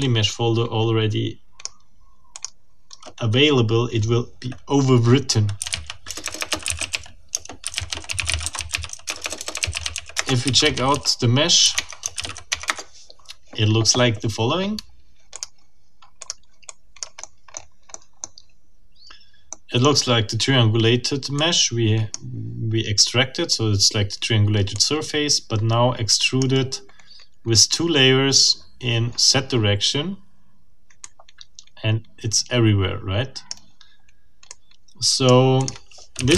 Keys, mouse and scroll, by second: 0.0-1.8 drag, 2.3 click, 5.3-12.8 typing, 11.7 Tab, 15.3 click, 16.2 click, 16.7-17.2 drag, 17.3 right click, 17.4-17.9 scroll up 2, 17.9 middle click, 18.2 scroll up 2, 19.1 scroll down 2, 19.5 middle click, 21.4-22.3 drag, 24.7-26.6 drag, 31.0-33.7 scroll up 1, 34.5-35.5 drag, 35.6 click, 35.9-36.3 typing.